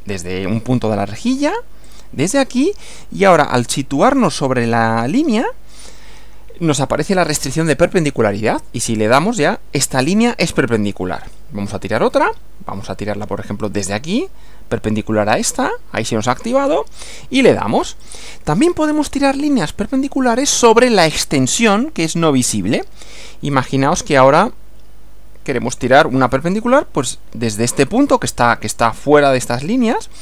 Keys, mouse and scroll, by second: 1.9 click, 9.0 click, 12.0 click, 13.8 click, 16.5 click, 18.0 click, 18.9 scroll up 2, 19.5 shift+middle click, 25.9 click.